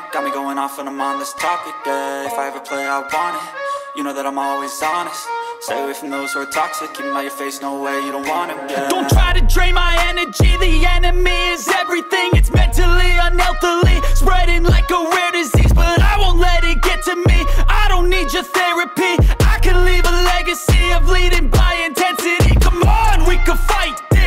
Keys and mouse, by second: 1.3-4.2 drag, 5.6 click, 7.6 click, 8.8 middle drag, 9.5 middle click, 9.7 middle click, 9.9 click, 10.3 click, 10.8 middle click, 11.3-12.9 drag, 13.1 shift+middle drag, 13.6-14.5 drag, 15.2-17.9 drag, 18.5 click, 18.8 middle click, 19.1 shift+middle click, 19.4 click, 19.8 click, 20.1 click, 20.4 middle click, 20.9 shift+drag, 22.9 click, 23.3 click, 23.9 click.